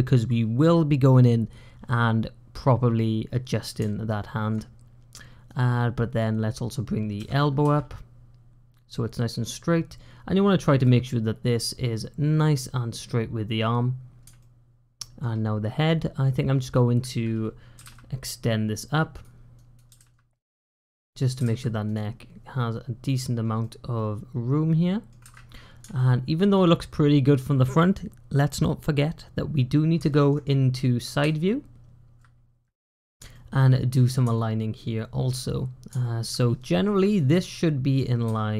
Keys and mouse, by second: 3.9 shift+middle click, 5.4 click, 7.0 g, 14.2 shift+click, 15.7 click, 17.6 g, 19.4 click, 19.7 g, 20.9 click, 21.2 g, 23.4-24.9 middle drag, 25.8 shift+middle click, 29.9 shift+middle click, 33.3 shift+middle click, 34.2-35.2 shift+middle drag, 35.9 shift+middle click, 36.7 click, 37.2 click, 38.1 g.